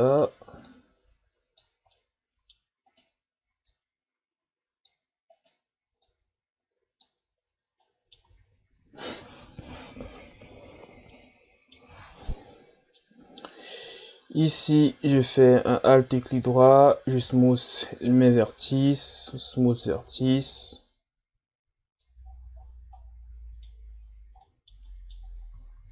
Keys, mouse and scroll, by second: 0.7 click, 2.0 middle click, 2.9 right click, 3.7-5.3 drag, 5.3 right click, 6.1-7.8 drag, 7.8 middle click, 8.3 Tab, 10.5 Tab, 11.1-13.6 middle drag, 13.6 alt+right click, 15.3 alt+right click, 16.3 ctrl+KP_Add, 17.2 w, 20.0 Tab, 20.6-22.2 middle drag, 22.2-23.0 scroll down 11, 23.0-23.9 middle drag, 23.9 scroll up 4, 24.4-25.2 middle drag, 25.2-25.9 scroll up 4.